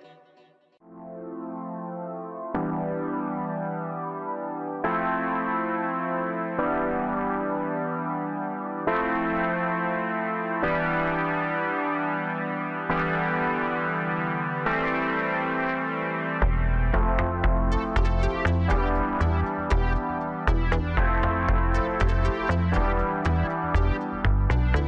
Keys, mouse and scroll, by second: 0.9 scroll down 2, 1.2-4.3 middle drag, 5.4-5.8 scroll down 2, 6.0 middle click, 6.7-7.6 middle drag, 7.6-8.4 scroll up 5, 9.1 ctrl+a, 10.9-11.7 middle drag, 11.7 drag, 12.0-12.4 scroll up 3, 12.9 ctrl+a, 14.7 click, 15.1-17.4 middle drag, 17.4 click, 18.9 click, 20.0 click, 21.2 h, 22.6 click.